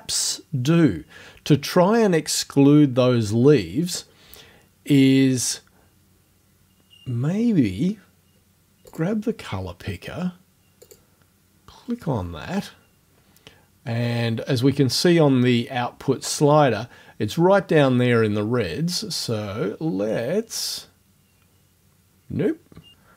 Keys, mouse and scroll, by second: 8.9 click, 10.9 click, 19.3-23.1 drag.